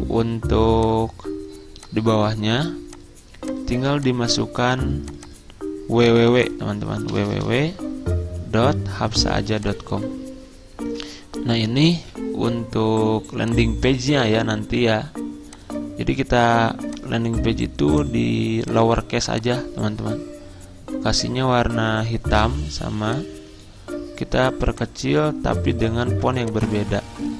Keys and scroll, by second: 7.2-12.6 typing.